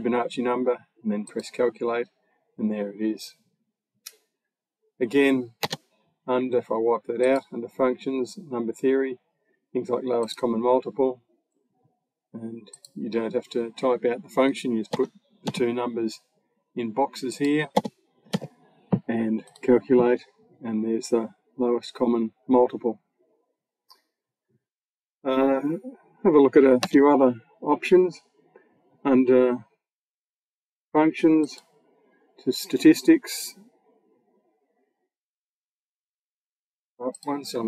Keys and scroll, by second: 5.4 BackSpace, 14.7 1, 15.3 6, 17.6 2, 18.1 0, 26.7 BackSpace.